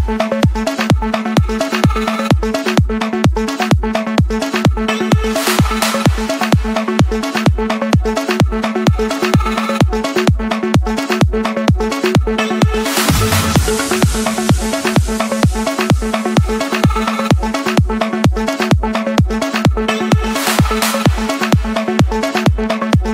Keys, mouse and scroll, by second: 0.5-1.6 drag, 2.8-3.9 drag, 6.2 click, 8.0 click, 11.7 click, 12.0-13.1 scroll down 11, 13.1-14.3 scroll up 4, 14.7-15.8 drag, 16.5 click, 17.3 click, 17.7 middle click, 17.8-18.2 scroll down 4, 18.2-20.0 scroll up 13, 20.0 Escape, 20.0 scroll up 1, 21.4-22.9 typing.